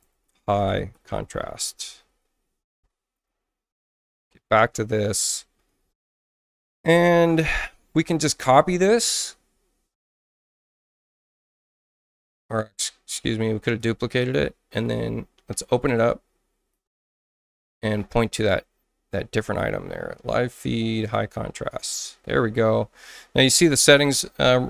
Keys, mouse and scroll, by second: 0.0-2.4 typing, 3.2 alt+Tab, 6.7 right click, 10.3 click, 11.8 right click, 13.6 click, 14.7 right click, 16.7 click, 18.4 click, 21.0 click, 21.2 click, 24.0 click.